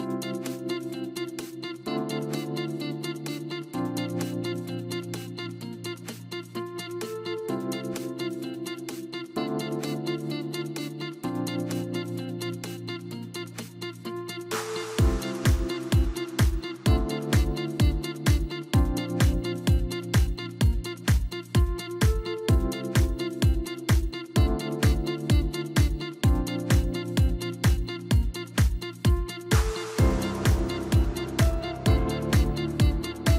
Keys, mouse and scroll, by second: 0.4 ctrl+KP_Add, 1.3 KP_1, 2.1 ctrl+KP_Add, 2.5 ctrl+KP_Add, 2.9 ctrl+KP_Add, 3.3 ctrl+KP_Add, 3.8 ctrl+KP_Add, 5.9-6.9 drag, 7.6 click, 8.4-9.5 scroll up 2, 9.5 click, 10.1 click, 10.2 click, 11.5 click, 12.4 click, 13.0-15.0 middle drag, 15.0 click, 15.2 click, 17.5 ctrl+KP_Add, 18.7-19.1 scroll down 3, 19.1 middle click, 20.0-20.7 scroll up 2, 21.1 shift+click, 21.9 scroll down 1, 22.1-23.1 middle drag, 23.1 click, 23.8-25.1 drag, 25.4-26.7 middle drag, 26.7 click, 27.0-27.4 scroll up 2, 27.4 Tab, 28.5-30.8 drag.